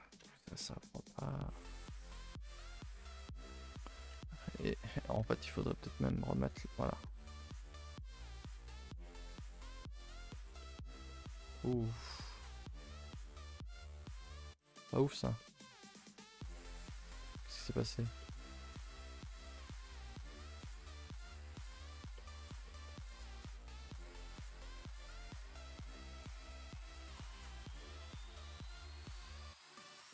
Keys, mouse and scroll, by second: 6.1 middle click, 6.3-6.6 scroll up 2, 6.6 click, 6.9 shift+middle click, 7.1 scroll up 1, 7.2 Tab, 7.4 middle click, 7.7 Tab, 7.8 click, 7.9 Tab, 8.1 shift+middle click, 8.5 scroll up 1, 8.7 a, 8.8 a, 8.9 middle click, 9.5 click, 9.8 middle click, 10.7 middle click, 11.5 middle click, 12.5 middle click, 13.1 middle click, 13.4 middle click, 13.9 middle click, 14.6 click, 14.9-16.4 middle drag, 16.4 click, 16.7-17.8 middle drag, 17.8 1, 18.0 click, 18.2 middle click, 18.5 g, 22.1 middle drag, 22.4-23.1 shift+middle drag, 23.1-23.4 scroll up 2, 23.4-23.9 shift+middle drag, 23.9 a, 24.0 a, 24.4 click, 24.7 middle click, 24.9 g, 26.3 click, 26.6 scroll up 1, 26.6 middle click, 26.8 g, 27.5 click, 27.9-30.1 typing, 29.8 click.